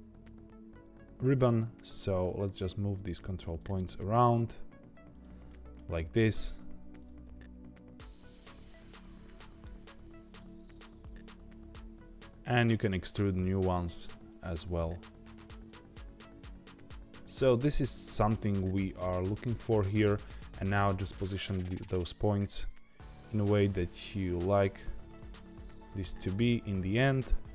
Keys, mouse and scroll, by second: 1.9 click, 2.3 g, 3.4 click, 3.7 g, 5.4 shift+middle click, 6.1-6.4 scroll up 1, 6.4 click, 6.9 click, 7.2 g, 8.9 click, 9.2 g, 10.7 click, 10.9 g, 13.1 e, 14.6 e, 15.7 e, 17.8 click, 18.0 g, 18.8 click, 19.0 g, 20.1 click, 20.4 g, 22.0 click, 22.3 g, 23.2 click, 23.8 click, 24.1 g, 25.4 click, 25.8 g, 27.1 Tab, 27.4-27.5 middle drag.